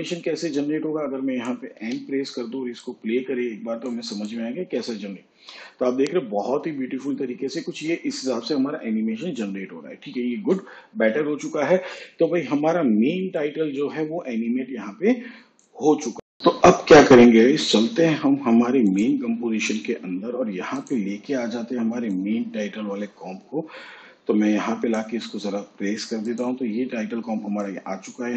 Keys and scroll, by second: 3.6 n, 6.4 space, 12.1 space.